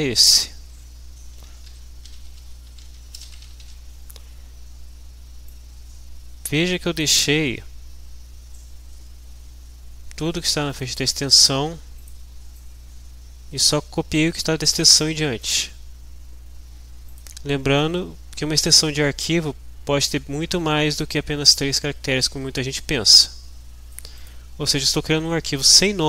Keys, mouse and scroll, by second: 1.4-4.1 typing, 5.5-7.2 drag, 10.8 click, 12.0 click, 12.6-14.3 drag, 15.5-16.5 drag, 23.1-24.1 drag.